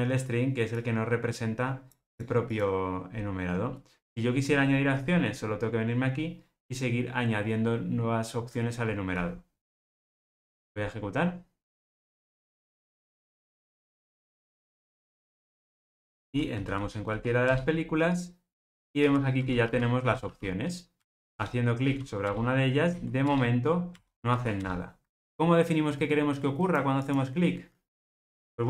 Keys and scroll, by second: 10.1 ctrl+r.